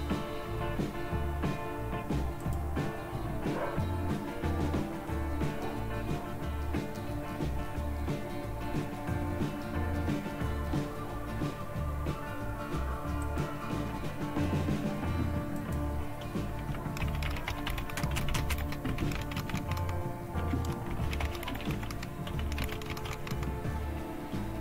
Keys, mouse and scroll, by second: 2.5 click, 13.2 click, 15.6-16.8 drag, 16.8-23.8 typing, 20.4 Tab.